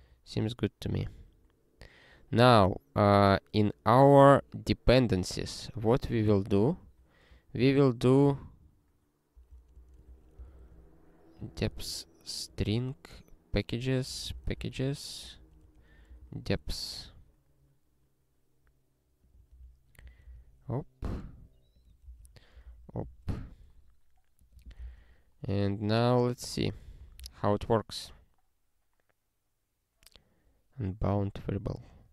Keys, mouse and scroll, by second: 1.0 scroll down 1, 2.2 scroll up 1, 4.2 click, 6.8 alt+f, 9.3 ctrl+alt+k, 9.7-12.4 typing, 12.7 Return, 13.8-15.2 typing, 15.8 ctrl+=, 16.2 alt+w, 19.3 click, 19.5 ctrl+b, 20.0 ctrl+f, 20.2 ctrl+alt+k, 20.3 ctrl+/, 21.7 click, 22.0 ctrl+b, 22.2 ctrl+y, 22.6 ctrl+alt+k, 23.1 ctrl+s, 24.4 click, 25.0 ctrl+e, 25.7 scroll down 1, 26.5 click, 27.0 ctrl+n, 27.3 ctrl+e, 31.2 scroll up 1.